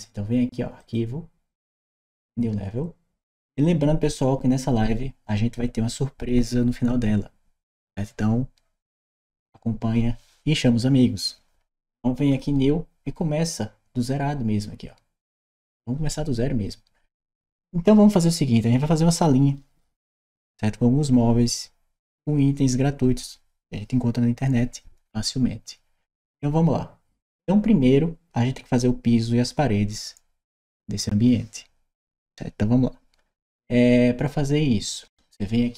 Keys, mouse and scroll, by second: 0.6 click.